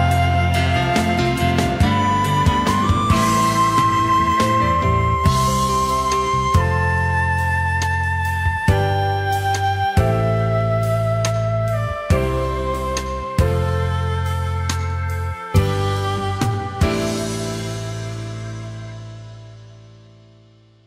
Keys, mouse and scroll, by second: 0.7 space, 2.6 space, 6.3 ctrl+shift+a, 7.1 ctrl+c, 7.6 shift+click, 9.5 alt+scroll down 1, 9.7 space, 10.9 alt+scroll up 1, 12.1-13.0 alt+scroll up 1, 13.1 alt+scroll down 1, 13.3 space, 14.1 alt+scroll up 1, 14.3 space.